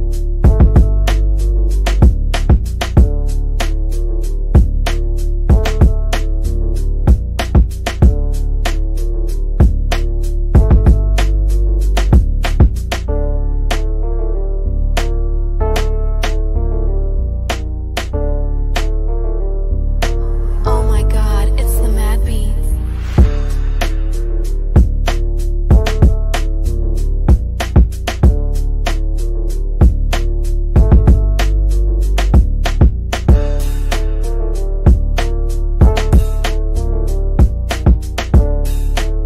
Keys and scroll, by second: 9.9 F3, 12.6 F3, 13.2 Escape, 28.3 shift+F2, 35.2 F3, 35.7 Escape, 36.7 shift+F2, 37.5 Escape.